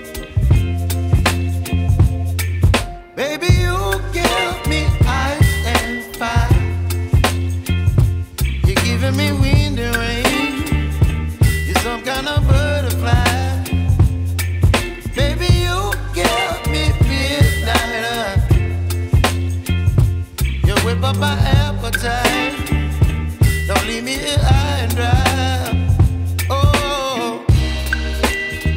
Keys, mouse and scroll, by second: 1.1 click, 2.9 Tab, 3.8 click, 4.4 scroll up 5, 6.2-7.5 scroll down 1, 7.5 click, 8.5 click, 11.7-13.8 middle drag, 13.8 Delete, 15.3-17.1 middle drag, 17.1 ctrl+s, 17.4 Tab, 18.5 g, 20.6-23.7 right drag, 25.2-26.5 scroll up 3, 26.5 click, 27.1-28.1 scroll down 9.